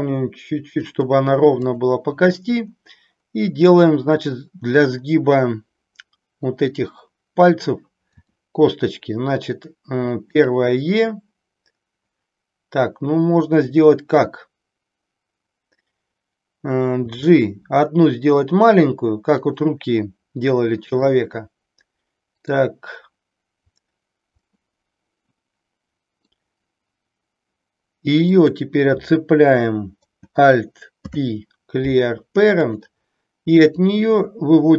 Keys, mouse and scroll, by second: 1.8 click, 8.1 e, 10.4 click, 17.0 g, 19.4 click, 21.0-22.5 middle drag, 24.5-26.4 middle drag, 28.3 click, 31.0 alt+p.